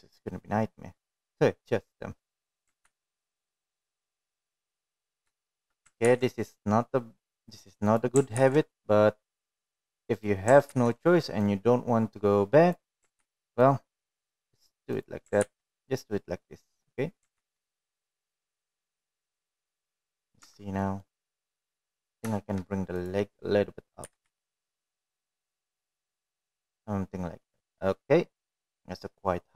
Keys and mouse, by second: 5.2 ctrl+r, 7.7 shift+middle click, 10.7 ctrl+r, 13.0 ctrl+r, 15.5 ctrl+r, 17.8 ctrl+r, 19.7 ctrl+r, 22.0 click, 22.5-23.0 middle drag, 22.9 Tab, 23.2 middle click, 23.9-24.2 middle drag, 24.7 shift+middle drag, 25.3 click, 26.5 g, 29.0 click.